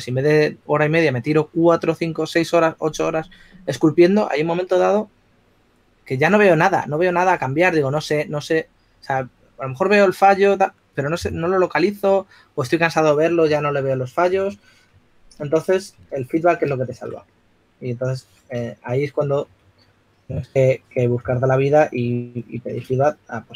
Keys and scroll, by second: 14.7-15.3 typing, 18.7-20.2 typing, 23.3 shift+s.